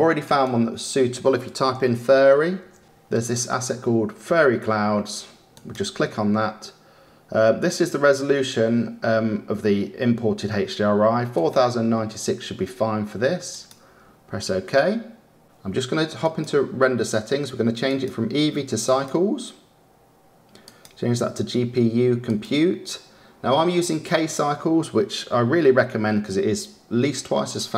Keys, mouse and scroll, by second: 0.3-2.3 drag, 2.3 r, 16.1 click, 17.8-24.1 drag.